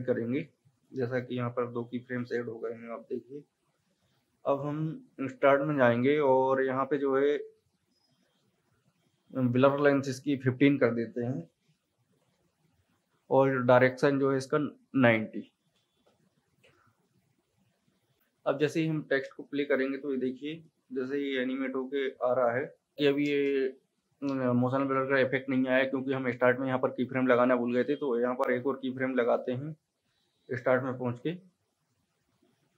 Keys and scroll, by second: 3.0 =, 3.8 =, 11.4 KP_1, 11.6 KP_5, 12.2 Return, 15.9 KP_9, 16.1 KP_0, 16.6 Return, 19.3 space, 23.3 space.